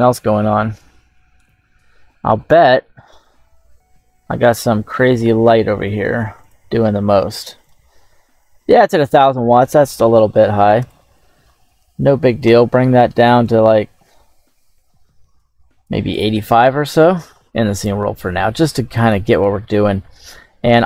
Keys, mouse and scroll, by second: 1.5 scroll down 2, 1.8 middle click, 2.3 scroll down 1, 2.7-3.6 middle drag, 3.7 scroll down 2, 6.3 click, 7.5-11.3 drag, 10.4 KP_0, 13.3-16.3 drag, 16.4-17.0 middle drag, 17.0-17.3 scroll up 2, 17.7 scroll up 2, 18.4 scroll up 1, 18.9 right click, 19.9-20.5 scroll down 2.